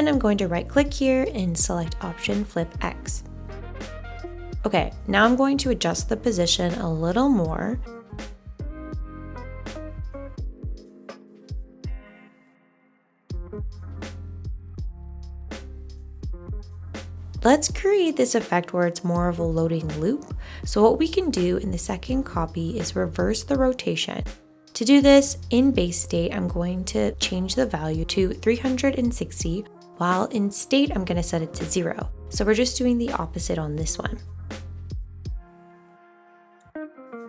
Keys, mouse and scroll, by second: 33.4 3, 33.7 6, 34.9 0.